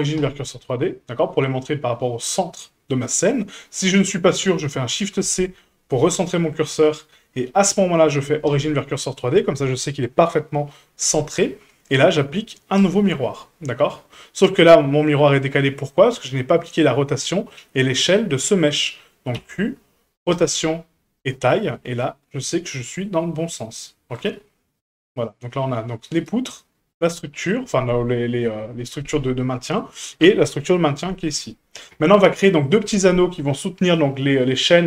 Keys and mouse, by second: 4.9 shift+c, 6.1-6.6 shift+middle drag, 7.7 q, 11.9-12.8 drag, 19.3 q, 22.7 shift+middle click, 24.1 right click, 26.1 right click, 29.7 right click, 31.9 a.